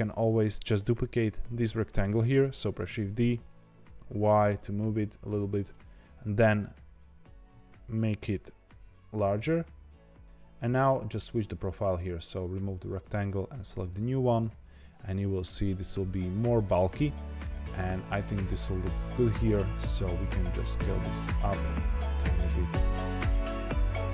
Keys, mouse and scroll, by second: 2.8 shift+d, 5.8 Tab, 6.3 Tab, 6.9 Tab, 7.2 s, 10.2 click, 12.1 click, 12.7 click, 14.7-19.1 middle drag, 19.1 Tab, 20.3 s, 23.2-24.1 middle drag.